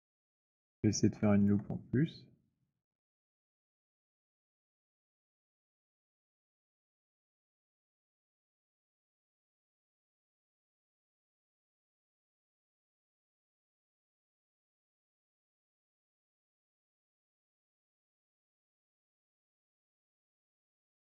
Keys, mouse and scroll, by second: 0.1 alt+middle click, 0.4 alt+right click, 0.6 alt+right click, 1.4 alt+right click, 3.5 alt+right click, 4.1 click, 8.1 click, 11.4 alt+click, 11.6 z, 14.7 shift+z, 18.1 alt+click.